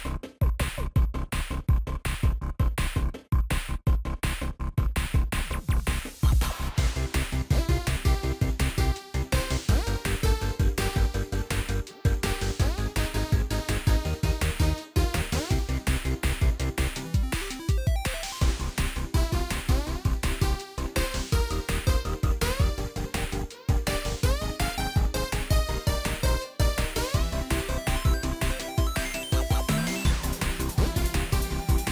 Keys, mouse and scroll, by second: 0.0-2.0 typing, 4.9 -, 11.4 ctrl+t, 12.9 alt+click, 19.5 ctrl+t, 20.9 alt+click, 27.0 double click, 30.4 double click.